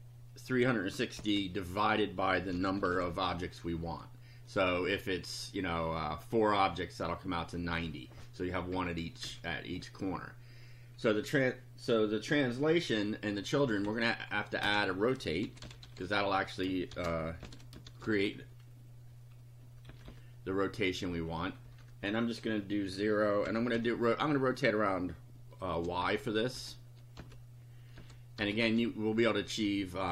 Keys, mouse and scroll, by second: 1.2-3.5 typing, 8.7 Down, 13.6 Up, 14.3 End, 14.6 Return, 15.2-18.3 typing, 19.8 Left, 21.6 KP_0, 23.4 ,, 23.7 i, 26.0-28.6 typing.